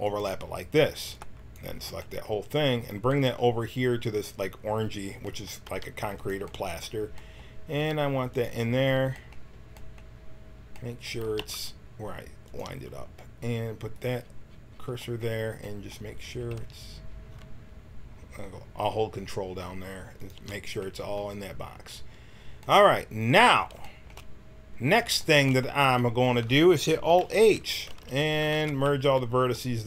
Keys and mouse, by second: 1.0 b, 5.6 g, 7.8 g, 11.2 g, 14.4-16.5 right drag, 16.5 s, 27.2 alt+h, 27.8 a, 28.0 a, 28.4 w, 28.8 a.